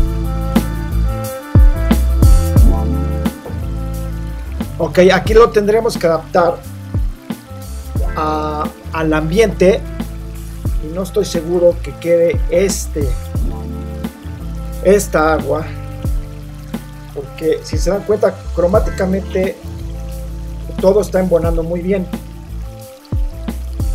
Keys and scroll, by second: 1.0 super+t, 1.7 Return, 2.1 super+0.